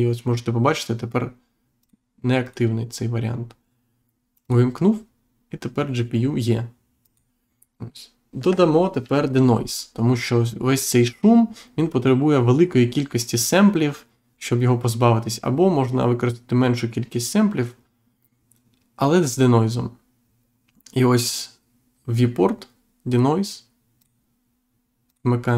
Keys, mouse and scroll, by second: 1.7 click, 2.4 click, 4.4 click, 7.0 click, 23.9 click, 25.0 click.